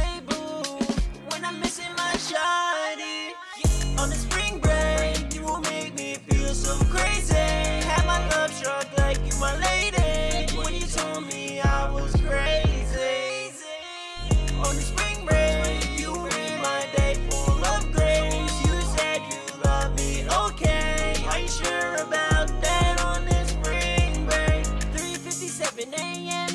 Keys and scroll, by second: 2.1-4.3 typing, 7.3-8.9 typing, 10.2 typing, 12.9-15.0 typing, 20.3-21.1 typing, 24.0-26.5 typing.